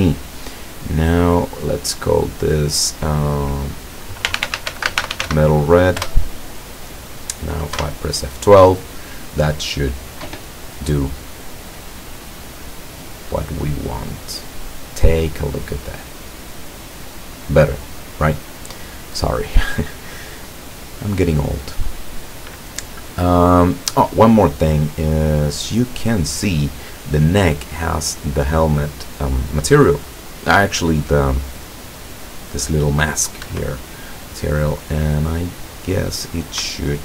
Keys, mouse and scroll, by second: 0.5-1.2 drag, 4.3-5.3 typing, 6.1 Return, 7.8 F12, 33.5 Escape, 34.2-34.8 scroll up 2, 35.5 right click, 36.8 shift+right click.